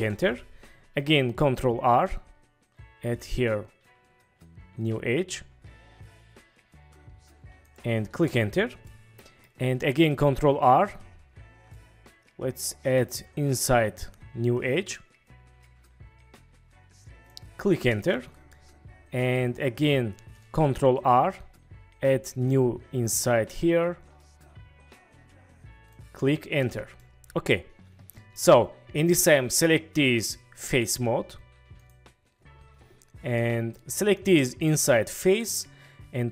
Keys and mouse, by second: 1.4 ctrl+r, 7.7 click, 8.1 Return, 8.8-9.4 drag, 10.2 ctrl+r, 17.9 Return, 18.5 click, 18.8-19.3 middle drag, 21.0 ctrl+r, 26.6 Return, 27.0-28.3 middle drag, 31.8-33.7 drag, 34.6 middle click, 35.5-36.3 middle drag.